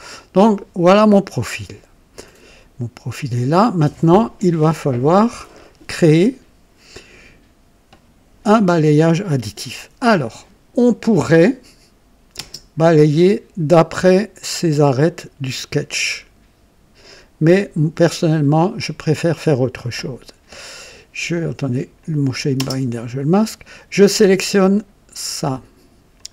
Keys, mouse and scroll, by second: 2.2 click, 2.5 typing, 11.2 click, 12.4 space, 22.0 click, 22.6 space, 24.7 click, 26.1 ctrl+click.